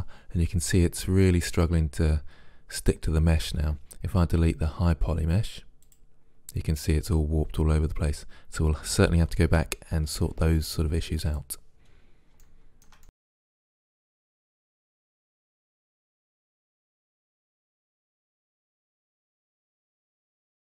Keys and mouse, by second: 5.9-7.7 drag, 11.3 click, 11.9-12.9 middle drag, 12.9 click, 13.4 right click, 13.7 Delete, 14.1 middle click, 14.4 right click, 14.6 Delete, 14.8 middle click, 15.2 right click, 15.8 middle click, 16.1 Delete, 16.3-17.4 drag, 16.9 Delete, 18.1 click, 18.3 Delete, 18.7 click, 19.9 Return, 20.5 middle click.